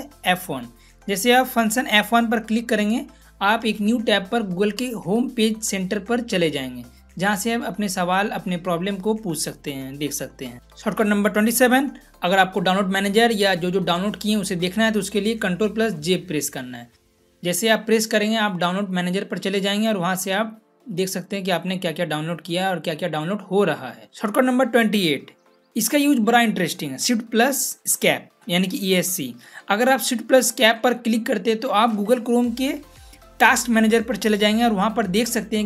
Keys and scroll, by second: 2.2 F1, 15.7 ctrl+j, 31.2 shift+Escape.